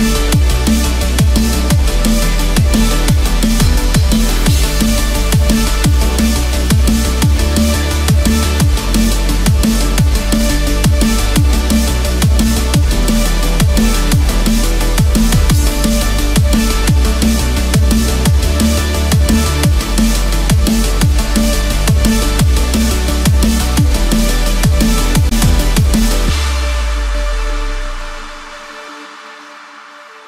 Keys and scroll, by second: 2.0 ctrl+-, 5.9 ctrl+=, 12.3 ctrl+z, 20.0 Return, 20.7 Escape, 26.4 Return, 26.9 Escape.